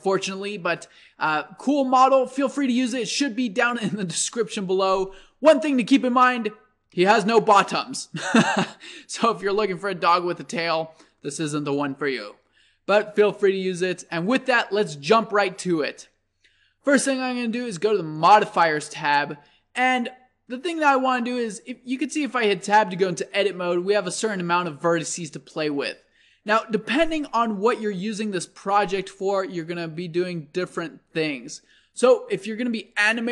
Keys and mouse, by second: 7.0-9.6 drag, 9.6-18.2 middle drag, 18.2-20.9 drag, 20.9 middle click, 21.8 Tab, 22.9 a, 24.2-26.0 middle drag.